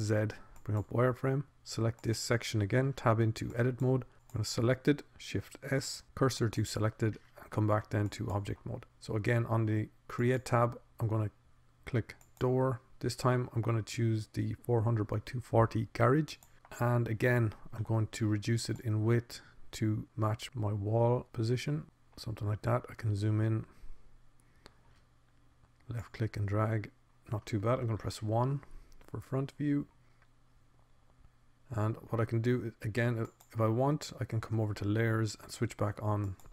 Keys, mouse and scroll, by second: 1.4 z, 4.2 Tab, 6.6 shift+s, 7.0 click, 8.8 Tab, 11.8-13.6 drag, 13.8 middle click, 14.0 click, 15.6 middle click, 20.2 middle click, 24.2 middle click, 28.0-29.0 middle drag, 29.8 KP_1, 35.0-36.5 drag.